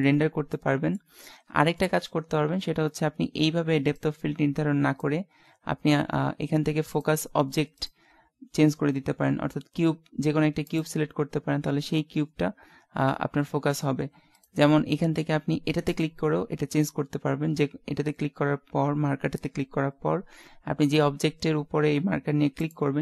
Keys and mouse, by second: 0.8 click, 4.0 click, 11.9 middle click, 12.7-14.3 middle drag.